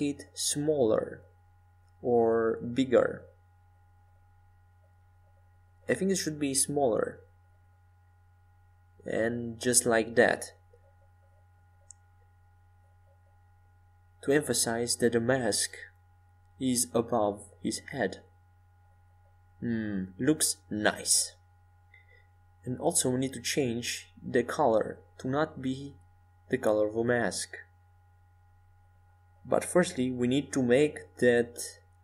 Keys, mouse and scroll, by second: 2.7 Tab, 3.7-5.6 middle drag, 8.2-11.6 middle drag, 18.2-20.5 middle drag, 20.5-22.9 drag, 27.2-31.6 drag, 31.7-32.0 drag.